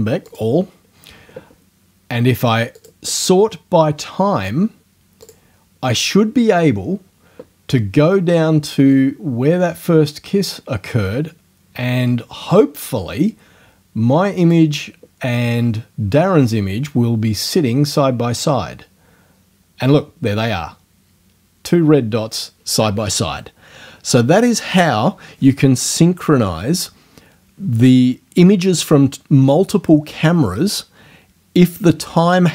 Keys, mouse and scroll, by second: 0.3 click, 2.8 click, 5.3 click, 9.0-14.7 drag.